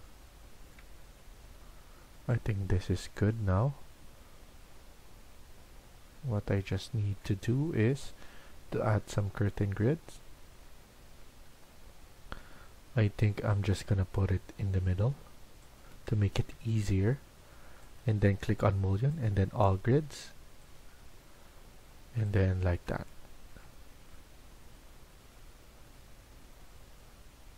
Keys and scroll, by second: 16.3 Escape, 16.4 Escape, 16.7 Escape, 22.6 Escape.